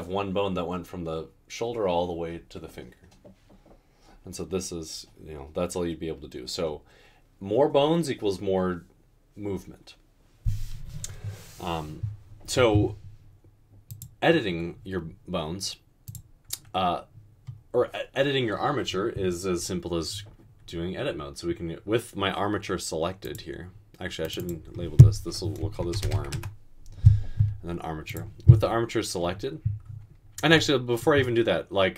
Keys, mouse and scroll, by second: 25.9 typing, 26.4 Return, 27.5 typing.